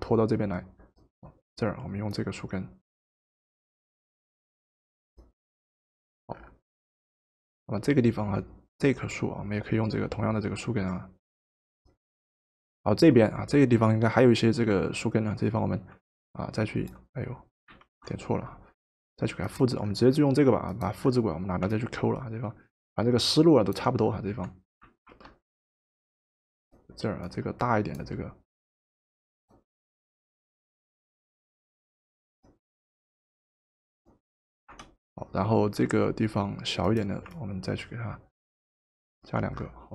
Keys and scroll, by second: 17.8 ctrl+z, 25.1 ctrl+t, 34.7 Return.